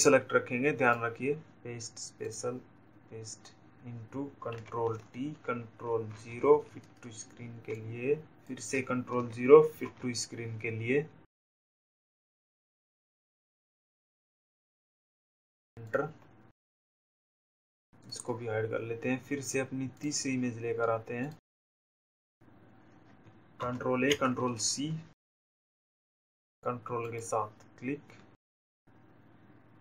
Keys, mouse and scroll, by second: 0.6 click, 4.1 click, 5.5 ctrl+t, 7.9 0, 11.3 shift+click, 16.5 click, 19.2 click, 20.7 click, 21.4 click, 23.5 ctrl+a, 25.5 click, 26.8 ctrl+click, 28.8 click.